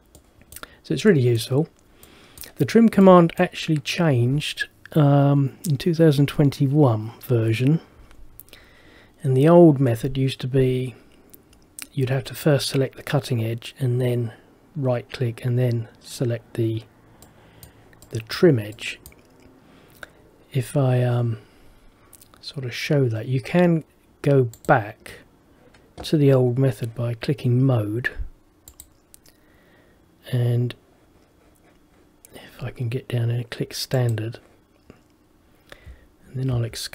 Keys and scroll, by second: 36.7 Escape.